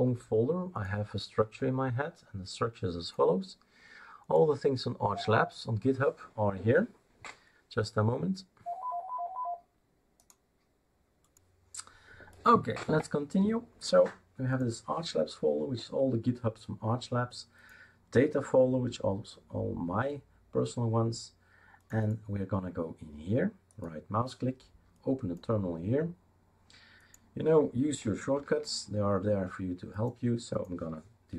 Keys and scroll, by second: 28.5 super+4.